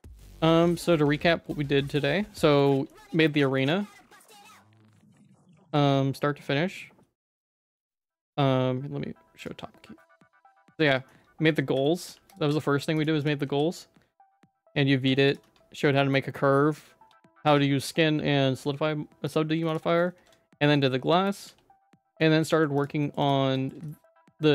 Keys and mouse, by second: 1.1 ctrl+s, 2.2 middle click, 2.7 middle click, 3.2 middle click, 3.5 middle click, 4.1 middle click, 4.9 shift+middle click, 5.7 ctrl+s, 8.1 shift+middle click, 9.3 click, 10.0 ctrl+s, 10.3 middle click, 10.9 middle click, 11.4 middle click, 11.8 middle click, 12.4 g, 13.2 click, 13.4 g, 15.0 ctrl+s, 15.4 Tab, 15.9 middle click, 17.0 Tab, 17.5 Tab, 18.4 Tab, 19.7 shift+click, 20.1 ctrl+s, 20.6 middle click, 21.4 g, 22.4 shift+middle click, 22.8 shift+click, 23.0 middle click, 23.3 Tab, 23.5 middle click, 23.9 shift+middle click, 24.2 middle click.